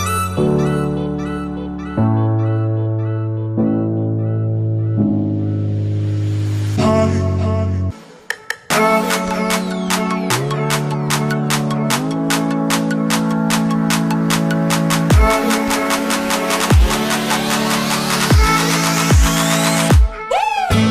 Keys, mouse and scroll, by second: 1.1-1.5 alt+scroll down 2, 1.5 space, 1.6-2.2 click, 2.1 space, 3.1-3.7 click, 4.0-5.2 alt+drag, 16.1 click, 18.6-19.5 shift+drag.